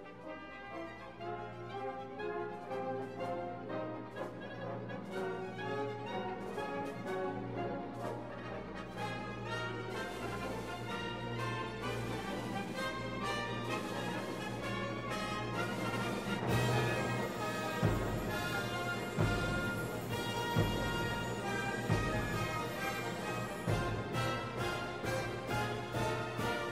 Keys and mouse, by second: 0.6 click, 1.0 middle click, 2.1 click, 3.3 click, 5.3 middle click, 5.8 click, 6.2 shift+a, 9.3 click, 10.4 click, 11.6-12.7 drag, 13.0 click, 15.0-16.7 drag, 16.9 click, 17.3 middle click, 18.1 click, 19.1 click, 21.1 right click, 21.5 g, 22.2 middle click, 24.0 middle click, 24.8 right click, 24.9 g, 25.4 shift+a, 26.4 click.